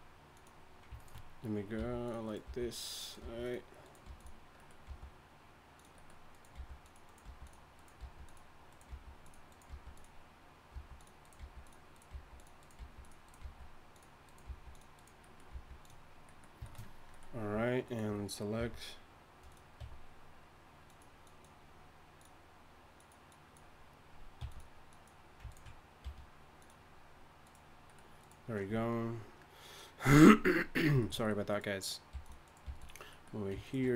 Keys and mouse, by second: 1.7 g, 2.4 g, 3.2 g, 4.9 g, 6.5-9.7 typing, 10.7-13.4 typing, 14.5 g, 15.5 g, 15.8-17.8 drag, 18.6 e, 19.8 e, 24.4 g, 26.0 g, 32.1 g, 32.7 g.